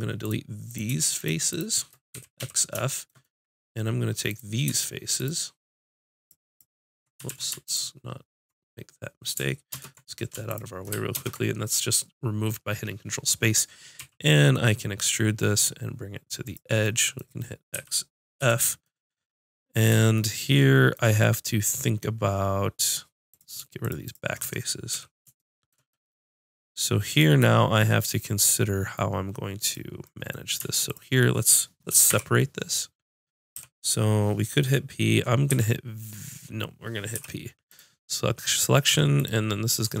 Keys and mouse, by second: 0.7-2.4 drag, 2.2 x, 7.3 ctrl+z, 9.7 ctrl+space, 10.5 click, 11.2 ctrl+space, 12.2-13.9 drag, 14.0 e, 16.6 click, 17.7 x, 22.9-25.9 drag, 24.4 x, 27.1 click, 29.5 click, 30.1-32.5 drag, 32.1 p, 33.6 p, 35.5 v, 37.2 p, 39.0 Tab, 39.2-40.0 drag, 39.9 Tab.